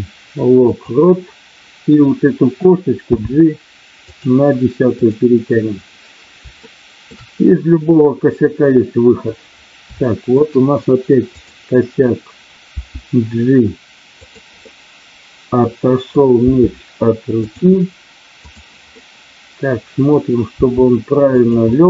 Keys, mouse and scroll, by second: 3.0 g, 4.0 click, 5.0 click, 6.6 shift+middle click, 7.7-9.2 middle drag, 10.0 shift+middle click, 11.2 click, 12.7 g, 14.2 click, 14.6-15.5 scroll up 1, 15.5 middle click, 16.3 g, 18.8 scroll up 1, 19.1 middle click, 20.5 g, 21.6-21.8 scroll up 1.